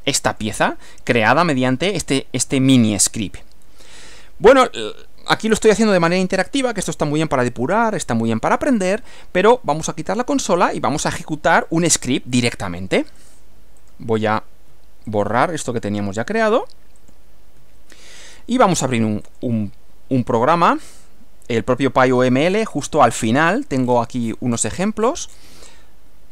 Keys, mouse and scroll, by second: 5.8 click, 10.5 click, 11.5 scroll down 1, 11.7-12.1 scroll up 2, 13.3 click, 13.9 click, 14.7 Delete, 15.1 click, 15.5 Delete, 15.7 click, 16.5 click, 17.1 click, 17.6 Delete, 19.3 click, 20.3 click, 22.7 click, 23.8-25.6 scroll down 4.